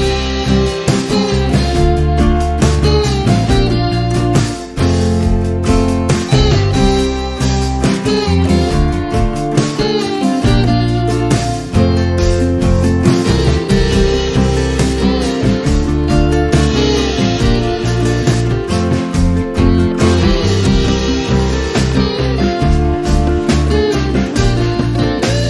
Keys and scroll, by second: 3.3 space, 9.6 m, 14.2 space, 24.3 m.